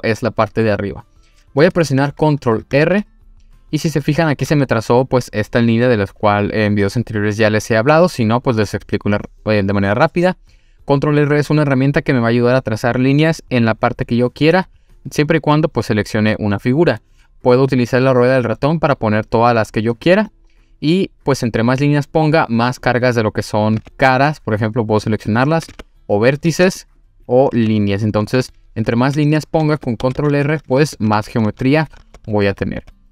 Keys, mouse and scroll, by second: 1.9-2.7 scroll up 2, 2.8 ctrl+r, 22.7 click, 23.8 3, 24.5 click, 25.0 click, 25.3 click, 25.6 click, 25.7 2, 26.5 1, 26.8 click, 27.2 drag, 27.5 2, 27.7 click, 28.0 click, 28.4 click, 30.0 ctrl+z, 30.2 ctrl+z, 30.5 ctrl+z, 30.7 ctrl+z, 30.9 ctrl+z, 31.2 ctrl+z, 31.3 ctrl+z, 31.5 ctrl+z, 31.7 ctrl+z, 31.9 ctrl+z, 32.5 ctrl+z, 32.7 ctrl+z.